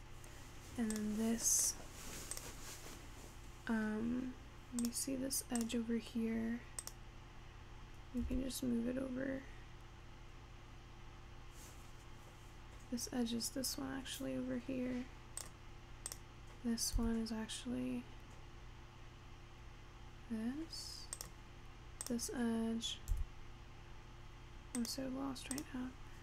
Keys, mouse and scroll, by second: 0.9 click, 1.7 click, 2.4 click, 4.9 click, 5.6 click, 6.9 click, 8.3 g, 16.1 click, 17.0 g, 22.1 click, 23.2 g, 25.6 click.